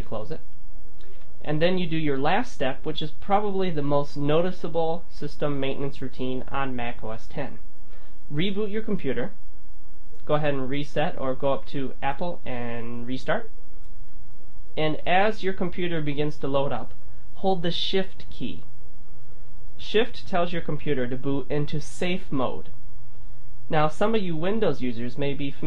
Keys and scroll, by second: 0.1 super+q.